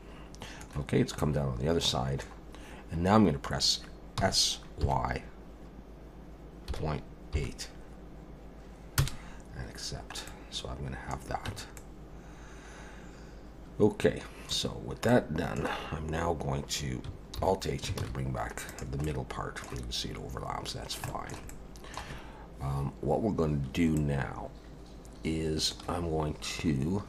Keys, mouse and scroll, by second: 0.9 scroll down 1, 1.2 middle click, 4.2 s, 9.8 scroll down 1, 10.3 middle click, 11.5 Tab, 11.8 middle click, 14.7 scroll down 1, 15.1 middle click, 17.4 alt+h, 18.0 alt+a, 18.7 click, 19.0 middle click, 20.4-21.0 scroll down 3, 21.1 shift+middle click, 21.5 middle click, 24.0 middle click.